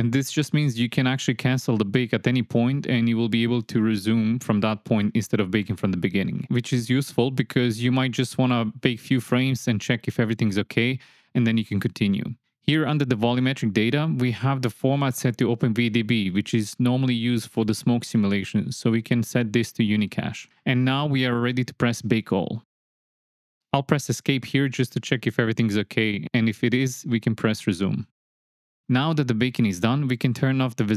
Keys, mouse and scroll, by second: 12.2 click, 18.6-20.0 drag, 22.4-23.5 drag, 27.0 click, 29.4 shift+Left, 29.4 shift+click.